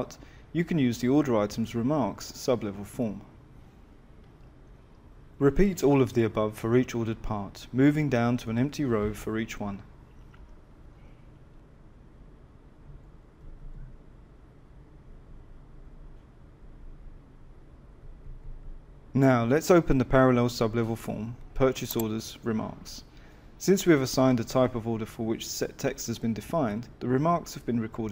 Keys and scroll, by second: 9.9 F6, 17.2 F10.